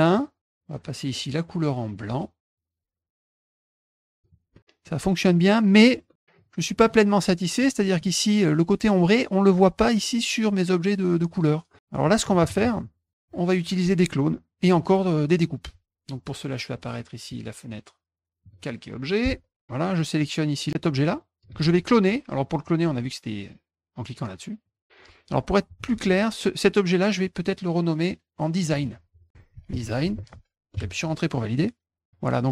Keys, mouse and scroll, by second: 0.1 click, 3.1 click, 4.1 click, 4.5 middle click, 5.2 click, 6.3 click, 7.3 middle click, 7.5 scroll up 2, 17.2 click, 18.4 click, 19.9 click, 20.6 click, 21.6 z, 24.6 click, 25.7 ctrl+z, 27.0 click, 28.6 click, 28.7 click, 29.2-30.5 typing, 30.7 Return, 32.0 click.